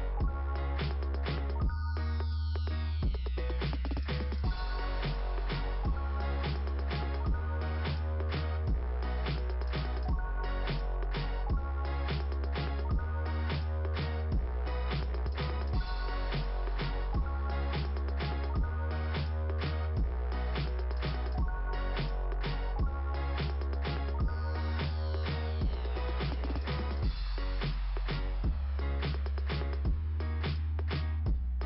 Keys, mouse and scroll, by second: 0.9 click, 2.2 click, 3.2 click, 5.1 click, 5.3 click, 5.6 click, 7.4 click, 8.2 scroll up 2, 11.2 scroll down 2, 12.5 click, 13.6 click, 15.0 click, 15.8 click, 16.5 click, 18.1 scroll down 4, 20.9 click, 23.8 click, 24.0 click, 24.3 click.